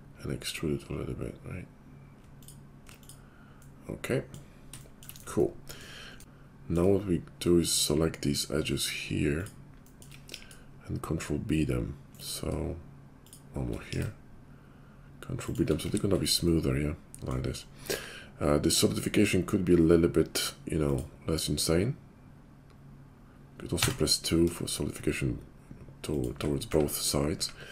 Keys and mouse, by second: 6.2 Tab, 6.2-7.7 middle drag, 7.7-9.9 shift+drag, 9.9-13.1 shift+middle drag, 10.3 ctrl+b, 13.1 shift+click, 13.2 shift+middle click, 13.9 ctrl+b, 15.8 Tab, 17.8 q, 22.6-24.4 drag, 24.4 middle click, 24.6 shift+click, 24.8-27.7 shift+middle drag, 26.7 `, 27.3 `.